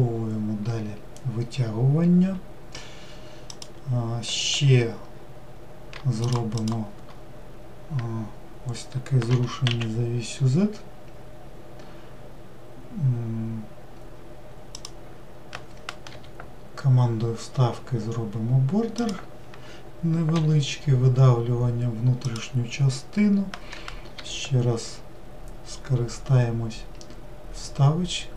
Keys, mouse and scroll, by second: 6.3 shift+click, 6.7 shift+click, 9.4 g.